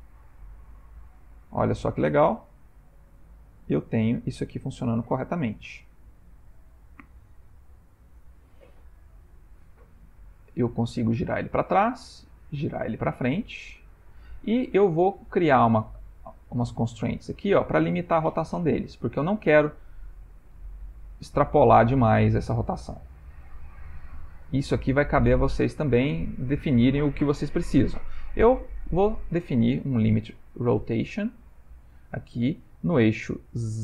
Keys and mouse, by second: 3.5 click, 3.7 r, 10.2 click, 10.7 r, 12.4 click, 12.6 r, 14.3 middle click, 15.5 click, 16.4 click, 16.9 click, 17.5 click, 20.6 r, 23.9 click, 24.2 r, 27.6 click, 28.9 click, 29.6 click, 32.6 middle click, 33.3 middle click, 33.7 ctrl+middle click.